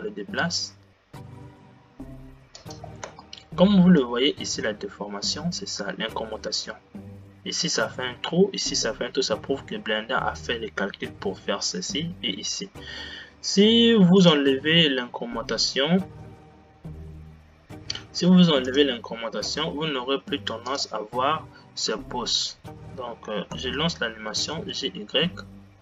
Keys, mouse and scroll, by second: 3.6 space, 4.1-15.3 middle drag, 15.3 click, 19.1-21.8 drag, 23.7 space, 24.8 g.